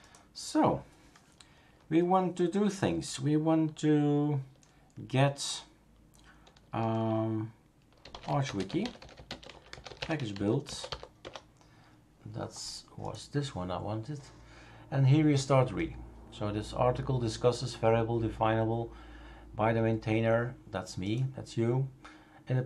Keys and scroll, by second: 7.8-11.4 typing.